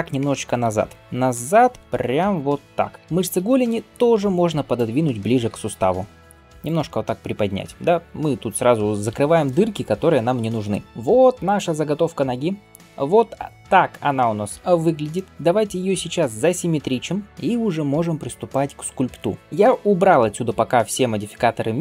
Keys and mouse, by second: 0.1 g, 2.2 middle click, 3.0 Tab, 3.0 click, 3.0 g, 3.5-4.8 right drag, 4.8-21.8 middle drag, 5.3 g, 10.8 Tab.